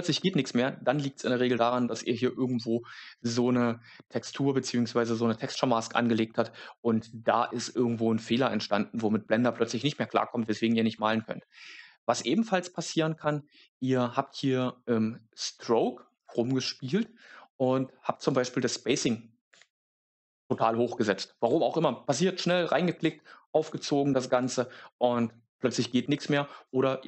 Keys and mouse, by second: 12.7 click, 18.3-20.0 drag, 19.8 KP_0, 22.7-24.3 drag, 26.6 click.